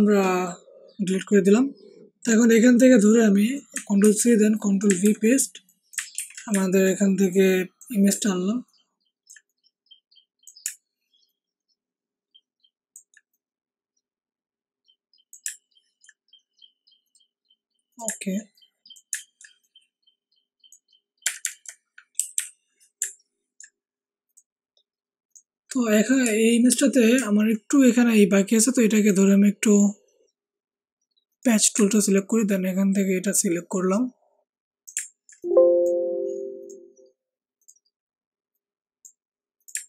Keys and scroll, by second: 4.0 ctrl+c, 5.0 ctrl+v, 6.1 ctrl+t, 21.2 Up, 21.4 Up, 21.5 Up, 22.1 Down, 22.3 Down.